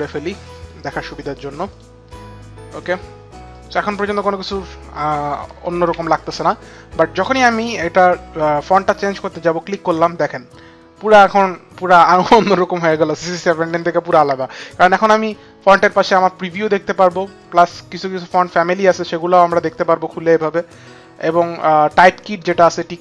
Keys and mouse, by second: 0.2 click, 3.2 click, 5.2 ctrl+alt+Home, 9.4 click, 17.8 click.